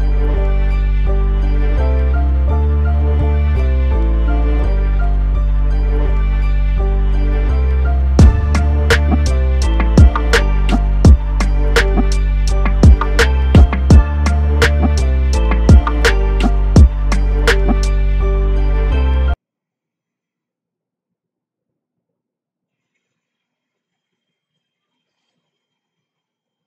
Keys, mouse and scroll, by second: 0.5 i, 1.7 click, 4.6 click, 5.6 click, 6.7 g, 7.3 x, 11.0 i, 13.6 click, 16.2-21.4 drag.